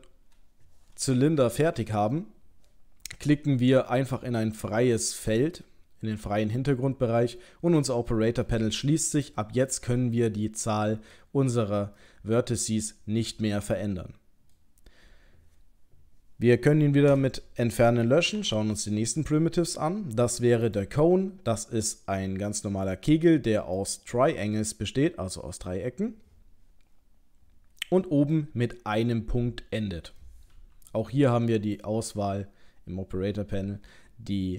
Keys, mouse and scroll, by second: 2.1-2.9 scroll down 1, 2.9-5.1 scroll down 1, 5.4 click, 8.5 middle click, 9.2 click, 9.7 middle click, 17.1 Delete, 18.4 shift+a, 21.6 middle click, 25.0-26.5 scroll up 2, 27.6-28.0 scroll down 1, 28.0 middle click, 31.8 click.